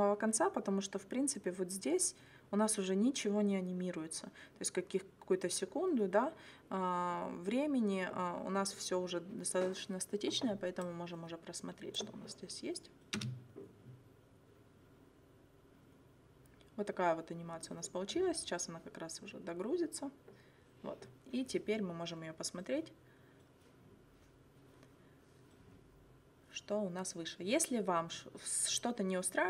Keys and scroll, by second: 13.2 space.